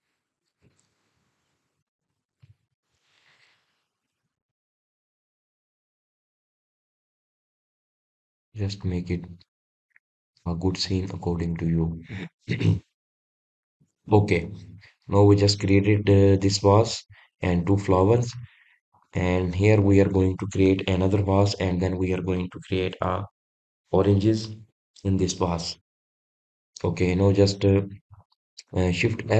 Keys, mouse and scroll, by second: 0.1 drag, 0.5-2.1 middle drag, 2.1-3.0 scroll up 3, 3.0 click, 3.9 shift+drag, 5.6 g, 7.9 drag, 8.4-8.9 scroll down 1, 8.9-12.1 middle drag, 12.9 click, 13.3-13.8 scroll down 6, 13.8-20.0 middle drag, 20.0-21.0 scroll down 1, 21.0 click.